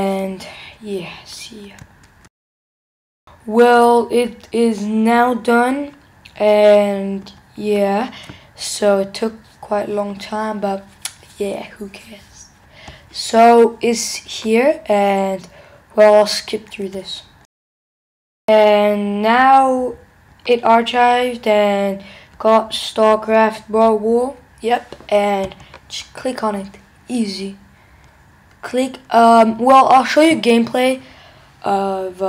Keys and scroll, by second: 2.2 shift+super+1, 6.4 alt+Right, 17.4 shift+super+1.